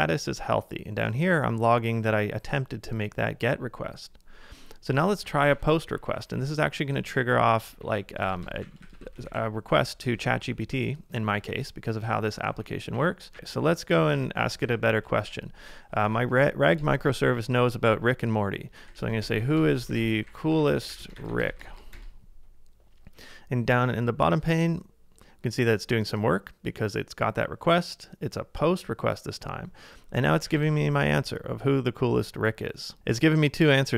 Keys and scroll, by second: 5.4 ctrl+a, 6.0 typing, 7.4-10.0 typing, 8.9 ctrl+a, 10.2 Left, 10.5 Left, 11.2 Right, 11.3 Right, 12.1 Left, 12.5 Left, 12.9 Right, 13.4 Left, 13.4 Down, 14.0 ctrl+w, 14.2 ctrl+w, 16.1 shift+', 18.6-19.7 typing, 30.4-31.2 typing.